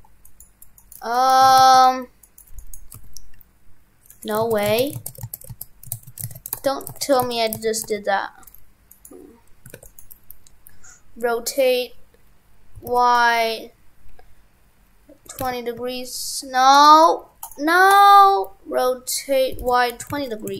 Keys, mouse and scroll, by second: 1.5 shift+f, 2.3 right click, 3.0 g, 4.3 right click, 4.5 ctrl+z, 4.8 ctrl+z, 5.0 ctrl+z, 6.0 ctrl+z, 6.3 ctrl+z, 6.6 ctrl+z, 7.0 ctrl+z, 7.2 ctrl+z, 7.9 ctrl+z, 9.0 right click, 9.8 shift+d, 12.8 r.